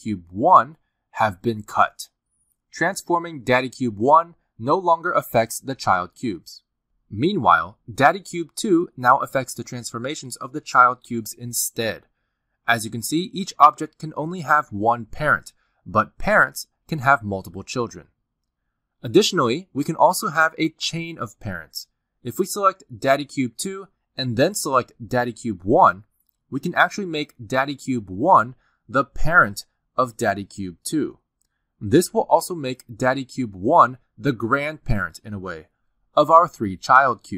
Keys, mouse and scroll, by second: 4.3 click, 5.0 g, 6.1 r, 9.7 click, 10.0 r, 12.4 click, 12.9-13.5 scroll down 3, 15.0 r, 15.8 g, 16.8 s, 23.2 click, 24.7 click, 25.4 shift+click, 28.1 ctrl+p, 30.5 click, 31.0 g, 33.7 r, 36.0 click, 36.3 r, 37.2 g.